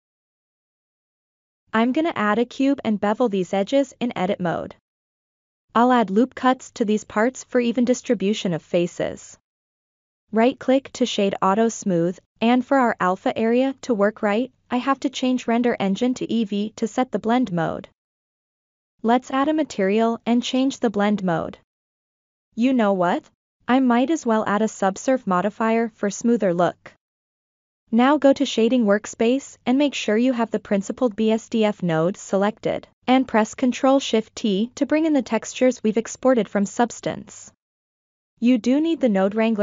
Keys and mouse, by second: 0.2 click, 0.4 shift+a, 1.6 g, 1.7 ctrl+click, 2.1 middle drag, 2.4 ctrl+middle drag, 3.0 Tab, 3.4 ctrl+b, 5.3 ctrl+r, 6.7 middle click, 7.1 ctrl+r, 8.0 middle click, 8.3 ctrl+r, 9.2 middle click, 10.0 Tab, 10.3 right click, 13.3 click, 14.1-14.7 drag, 16.1 click, 17.0 click, 17.6 click, 19.1 click, 19.8-20.8 drag, 21.9 middle click, 22.4 click, 23.5 ctrl+2, 24.9 click, 27.3-28.2 shift+middle drag, 31.4 click, 32.8 ctrl+middle click, 33.4 click, 35.1 ctrl+shift+t.